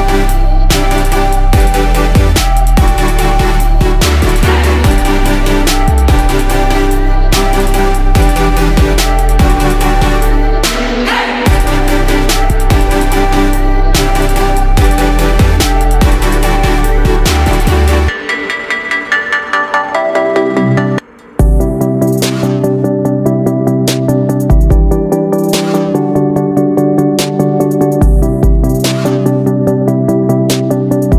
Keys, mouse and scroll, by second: 1.2 ctrl+shift+click, 4.0 click, 12.6-13.8 drag, 19.1 shift+click, 22.0 ctrl+g, 23.2-31.1 drag.